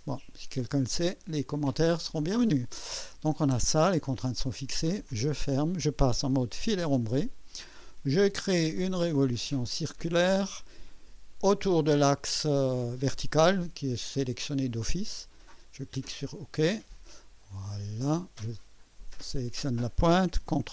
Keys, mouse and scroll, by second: 1.5-2.5 right drag, 5.0 click, 6.6 typing, 10.2 click, 16.0 click, 17.4-18.4 drag, 19.2 click.